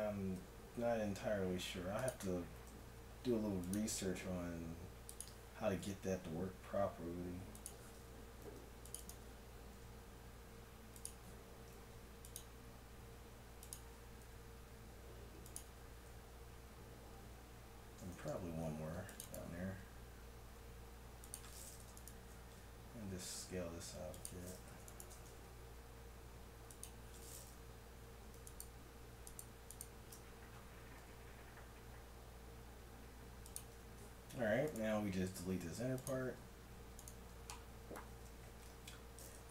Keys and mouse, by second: 0.4 s, 2.7 ctrl+r, 5.8 s, 8.4 ctrl+r, 9.7 s, 11.7 ctrl+r, 14.2 s, 15.7 Tab, 18.1 Tab, 18.8 ctrl+r, 20.5 s, 21.9 right click, 23.0 s, 23.7 right click, 24.9-26.9 right drag, 25.7 s, 28.5-31.6 right drag, 30.9 s, 33.8 Tab, 34.7 right click, 35.5 x, 36.4 Tab, 37.4 Tab, 38.6 a, 38.8 z.